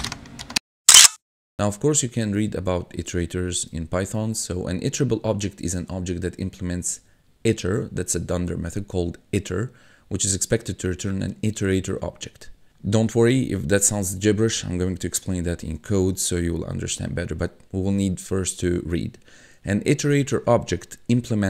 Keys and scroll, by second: 4.3 1.